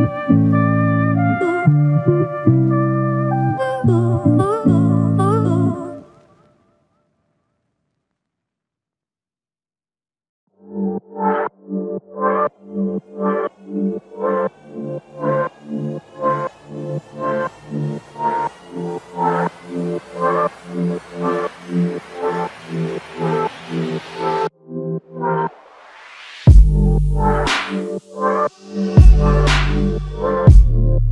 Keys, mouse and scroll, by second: 0.6 double click, 0.9 shift+click, 2.6 ctrl+click, 4.8 shift+click, 7.3 alt+click, 8.9 shift+click, 11.4 alt+click, 12.0 shift+click, 13.4 alt+shift+click, 14.0 ctrl+alt+click, 14.7 alt+click, 16.2 ctrl+click, 17.9 ctrl+l, 18.8 shift+click, 20.9 shift+click, 21.9 ctrl+alt+click, 24.1 f, 25.0 double click, 30.2 ctrl+click.